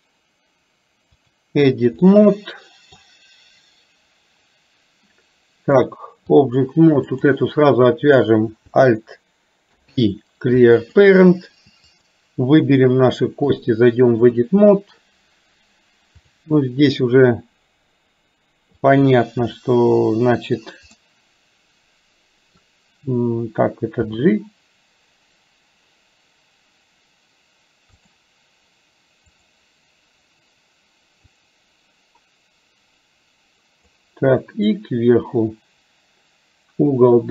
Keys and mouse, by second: 2.1 middle click, 5.8 click, 7.4 click, 9.7 alt+p, 13.6 click, 21.1-22.6 middle drag, 24.1 g, 31.5-34.1 drag, 34.9-37.3 drag.